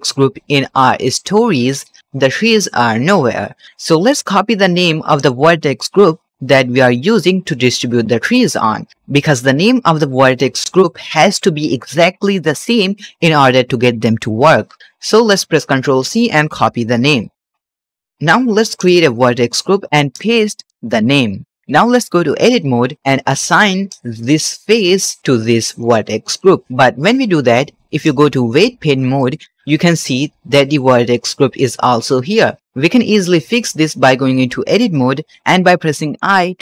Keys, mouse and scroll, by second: 1.5 click, 4.0 click, 5.0 click, 8.1-17.2 drag, 17.4 click, 18.0 scroll up 3, 18.1 shift+middle click, 18.7 click, 19.8 click, 20.0-21.6 drag, 22.4 Tab, 23.2 3, 23.8 click, 26.2 click, 26.6 ctrl+Tab, 28.4 ctrl+Tab, 29.5 middle click, 30.3 scroll up 1, 33.5 ctrl+Tab, 34.8 middle click, 35.3 scroll up 1, 36.0 i.